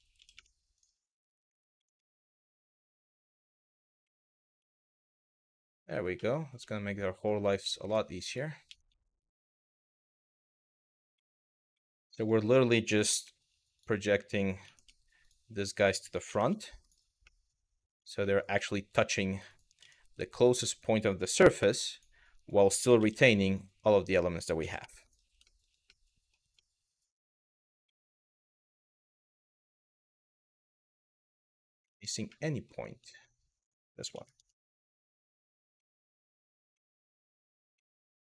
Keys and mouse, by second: 0.0 y, 0.4 click, 1.4 g, 3.4 click, 3.7 middle click, 4.3-5.6 middle drag, 5.9 middle click, 6.3 middle click, 7.4 shift+middle click, 7.9 click, 8.3 g, 8.5 y, 9.0 click, 9.6 click, 9.9 g, 10.5 click, 10.9 middle click, 11.4 middle click, 11.8 shift+middle click, 13.4 click, 14.3 g, 14.8 click, 16.4 click, 16.9 middle click, 18.3 middle click, 19.1 click, 19.4 g, 19.6 y, 19.9 click, 20.4 click, 21.5 click, 22.1 click, 23.1 click, 23.7 click, 24.7 click, 25.1 shift+middle click, 25.6 middle click, 26.2-27.3 middle drag, 27.6 shift+middle click, 28.2-29.8 middle drag, 30.0 shift+middle click, 30.4 middle click, 31.6 shift+middle click, 31.9 middle click, 32.8 shift+middle click, 33.8 g, 34.0 y, 35.1 click, 35.5 middle click, 36.5 middle click, 37.5 middle click, 38.1 click.